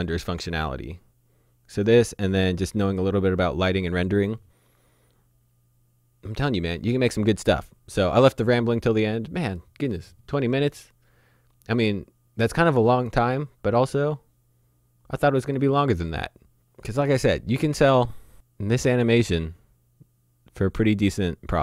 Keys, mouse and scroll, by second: 18.3 click.